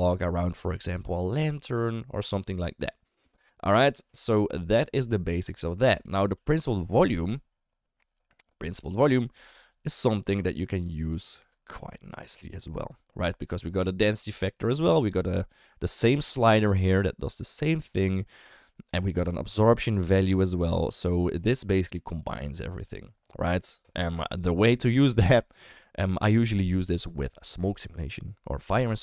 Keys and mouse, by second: 5.9 middle click, 6.3 ctrl+x, 6.8 shift+a, 10.4 click, 10.6 click, 11.5 shift+middle click, 15.2-18.9 drag, 21.6 shift+middle click, 22.2 click.